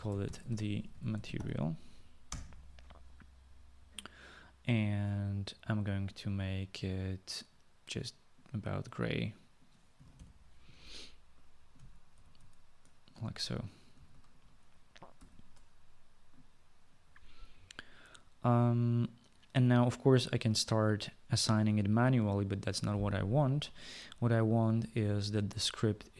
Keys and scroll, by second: 0.0-1.9 typing, 2.4 Return, 9.8-10.5 typing, 12.2 typing, 12.3 ctrl+c, 13.2 ctrl+v, 14.1 ctrl+v, 15.2 ctrl+s.